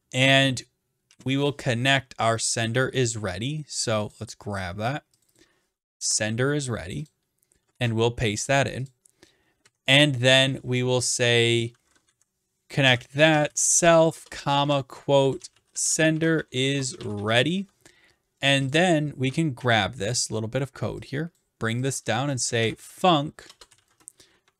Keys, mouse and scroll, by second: 1.1 typing, 2.6 click, 4.2 click, 5.4 click, 5.8 click, 6.0 ctrl+c, 7.1 click, 7.8 ctrl+v, 9.0 click, 9.7 Right, 12.1 Left, 12.6-17.8 typing, 18.7 click, 18.9 click, 19.6 ctrl+c, 21.4 click, 21.9 click, 22.3-24.4 typing.